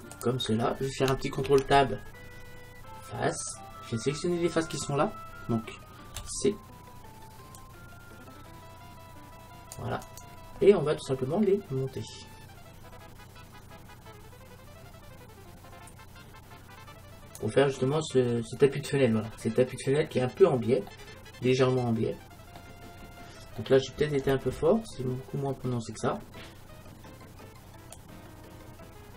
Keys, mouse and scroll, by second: 0.3-2.1 drag, 1.5 ctrl+Tab, 3.6 ctrl+Tab, 6.2 c, 12.2-13.9 drag, 18.7-22.4 middle drag, 23.1 middle click, 23.2-24.2 middle drag, 28.0-29.1 drag.